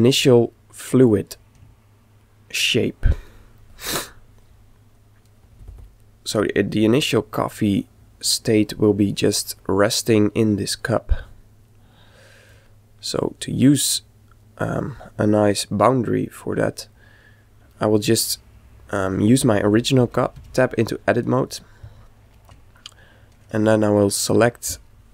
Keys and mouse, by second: 1.8-3.5 middle drag, 5.0 click, 9.5-11.2 middle drag, 11.3 middle click, 13.2 click, 16.7-18.2 middle drag, 18.2-20.0 right drag, 20.4 Tab, 21.9 z, 22.6-24.4 middle drag, 24.2 KP_5.